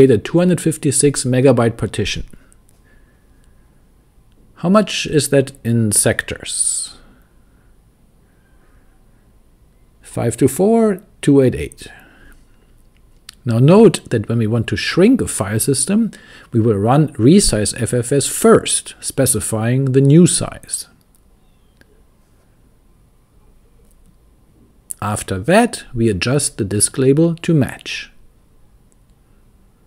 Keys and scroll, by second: 4.1 super+c, 5.1-9.6 typing, 11.7 super+c, 13.0-19.9 typing, 22.3 Return, 26.1-29.3 typing.